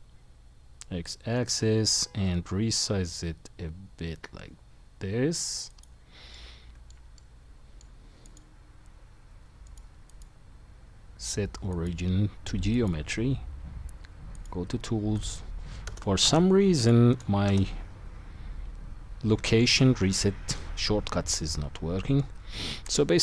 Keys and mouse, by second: 2.1-6.3 middle drag, 2.1 s, 5.8-8.3 drag, 9.9 click, 14.4 click.